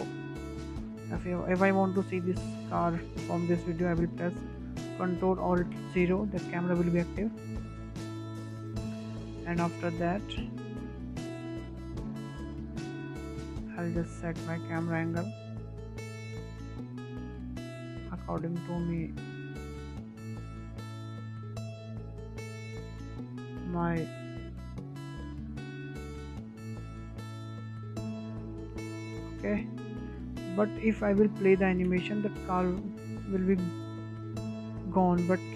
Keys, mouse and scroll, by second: 6.5 ctrl+alt+KP_0, 8.3 n, 9.6 click, 10.5-10.8 scroll down 1, 10.8-11.9 shift+middle drag, 11.9 click, 12.3 click, 13.0 n, 13.6-17.2 shift+middle drag, 17.2-17.8 scroll up 1, 17.8-18.1 scroll down 1, 18.1-23.9 middle drag, 23.9 n, 24.7 click, 25.2-27.0 shift+middle drag, 27.0 click, 27.9-32.0 shift+middle drag, 32.0 n, 32.6 space.